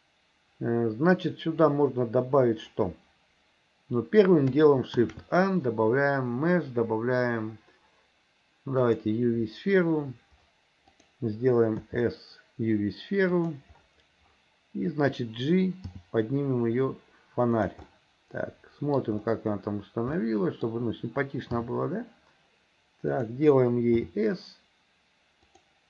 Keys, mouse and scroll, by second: 0.0 click, 5.0 shift+a, 10.9 click, 11.8 s, 16.0 g, 17.9-19.0 middle drag, 20.2 middle click, 21.6 g, 24.0 s.